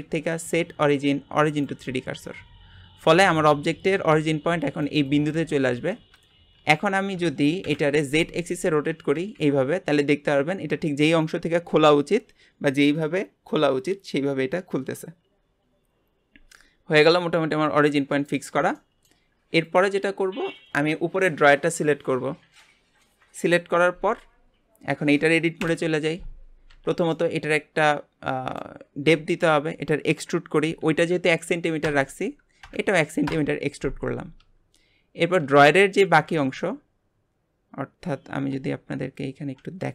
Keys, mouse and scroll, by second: 6.5 Tab, 7.2 Tab, 7.6 KP_Divide, 8.6 scroll down 1, 8.9 r, 18.8-19.6 shift+middle drag, 19.6 click, 25.6 KP_Divide, 26.7 Tab, 27.1-29.1 middle drag, 29.1 a, 30.6 e, 34.5 Tab.